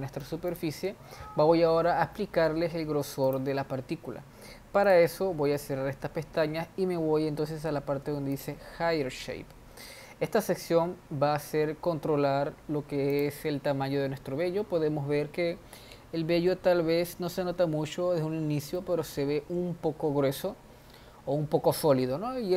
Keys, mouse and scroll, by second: 0.4 shift+middle click, 1.1 click, 3.8 click, 4.5 scroll down 5, 5.5-8.7 drag, 9.1 click, 9.6-10.6 scroll down 4, 13.8 click, 17.3-19.3 scroll up 1, 19.3-22.5 shift+middle drag.